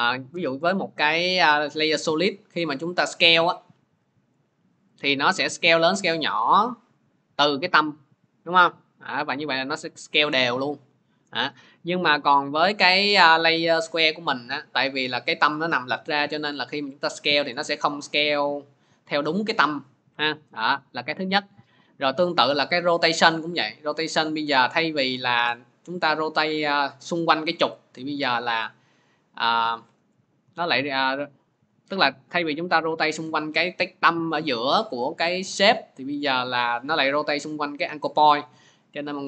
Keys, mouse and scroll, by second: 0.2 ctrl+y, 0.4 Return, 1.7 scroll, 3.9 s, 6.1 middle click, 11.2-12.9 drag, 13.3-13.7 scroll, 20.6 click, 21.0 ctrl+z, 22.5 click, 24.9 click, 25.1 ctrl+z, 29.5 click, 29.8 ctrl+z, 32.6 click, 32.9 ctrl+z.